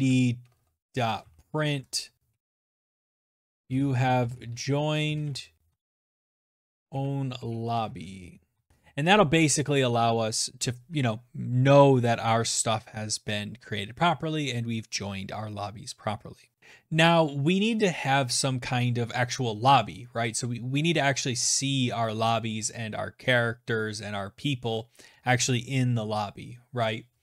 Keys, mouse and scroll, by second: 27.1 alt+Tab.